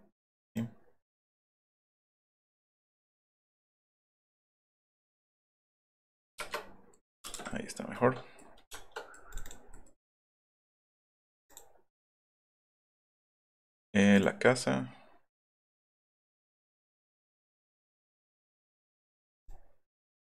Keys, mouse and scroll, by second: 0.5 middle click, 1.9-3.0 middle drag, 3.0 click, 4.0-5.9 drag, 6.3 Return, 6.6 middle click, 7.2 space, 7.2 middle click, 7.6 middle click, 8.5 middle click, 9.3 click, 9.4 click, 10.0 right click, 10.7 click, 11.4 click, 12.2 click, 13.6 click, 14.1 click, 16.0 click, 17.2 click, 17.7 right click, 18.6 click, 18.8 click, 19.4 middle click.